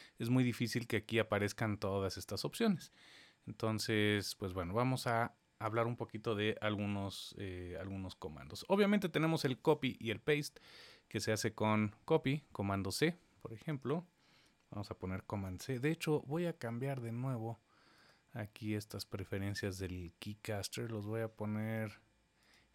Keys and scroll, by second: 14.7 super+c.